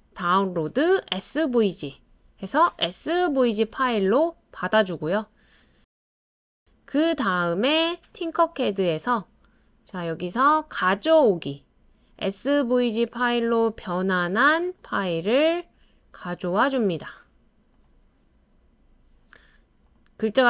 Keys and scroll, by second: 3.4 typing, 6.6-7.3 typing, 17.7-18.4 typing.